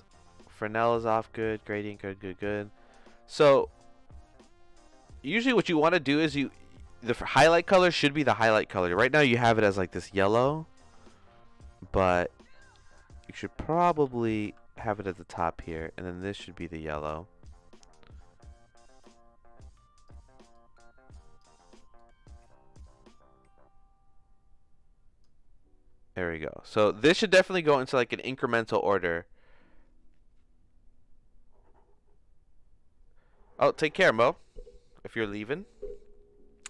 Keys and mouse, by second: 2.0 middle click, 2.7 middle click, 14.0 ctrl+c, 14.4 ctrl+v, 15.6 click.